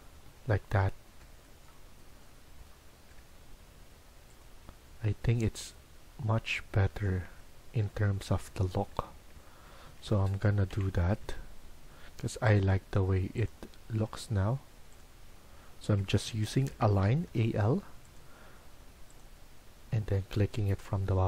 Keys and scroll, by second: 0.2 Escape, 7.8 Escape, 9.8 Escape, 10.0 Escape, 10.6-11.1 typing, 15.8 Escape, 15.9-17.1 typing.